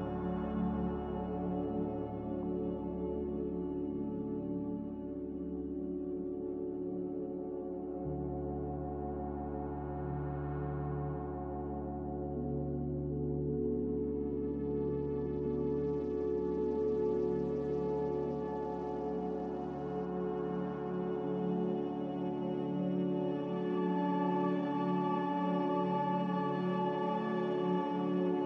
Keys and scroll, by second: 0.8 a, 23.1 ctrl+z, 23.5 ctrl+z.